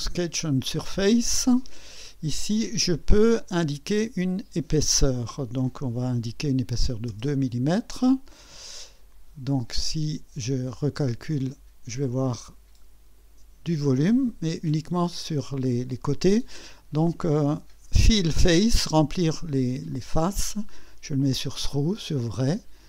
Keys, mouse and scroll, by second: 3.9 click, 7.1 KP_2, 10.7 click, 12.0-13.4 drag, 19.9 click, 20.5 click, 21.6 click.